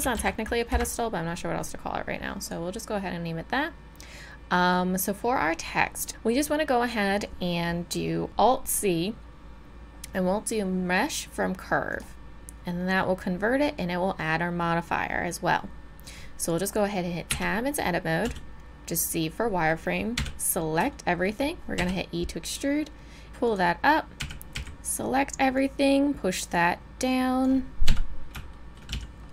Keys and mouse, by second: 2.4-8.3 drag, 8.3 alt+c, 17.3 Tab, 18.2 z, 19.3 middle click, 20.2 a, 21.9 e, 24.2 a, 24.6 a, 25.6-27.4 drag, 27.9 KP_3, 28.9 z.